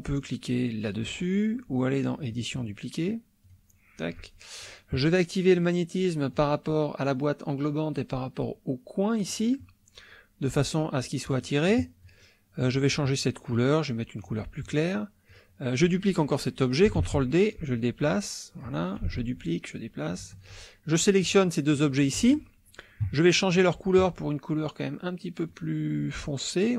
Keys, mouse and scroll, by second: 2.3 click, 3.4 click, 4.2 click, 5.6 click, 6.3 click, 9.2 click, 10.4-11.6 drag, 12.0 click, 12.5 click, 14.2 click, 14.6 click, 15.3 click, 17.0 ctrl+d, 17.5 ctrl+click, 18.0-18.5 scroll down 2, 18.9-20.2 drag, 19.0 space, 20.4 shift+click, 21.2 click, 21.7 click, 22.1 shift+click, 23.5 click, 25.4-26.7 drag.